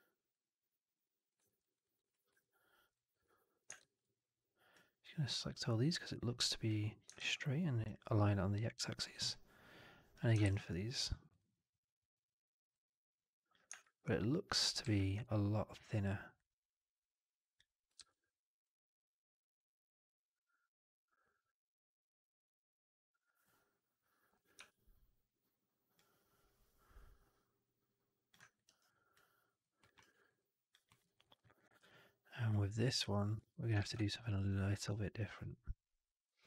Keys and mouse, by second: 0.2-1.2 drag, 1.3 alt+middle click, 1.5 alt+right click, 1.7 alt+right click, 2.3 1, 2.3 alt+middle click, 2.8 alt+right click, 3.1 alt+middle click, 3.6 shift+x, 4.6-6.6 drag, 7.0 alt+x, 9.2 click, 10.3 alt+x, 12.5 click, 13.9 shift+x, 14.7 shift+x, 16.2-17.4 drag, 17.8 shift+x, 18.9-24.2 drag, 24.8 4, 25.8-28.2 drag, 28.4 alt+right drag, 28.7 alt+right drag, 29.0-29.5 alt+drag, 29.7 alt+middle drag, 29.9 alt+right drag, 30.1 alt+right drag, 30.3-30.6 alt+drag, 30.8 alt+middle drag, 30.9 alt+right drag, 31.1 alt+right drag, 31.3 alt+click, 32.0 3, 32.9 f, 33.4 alt+click, 33.6 shift+x, 33.9 alt+right click, 34.1 alt+right click, 34.3-36.4 alt+drag.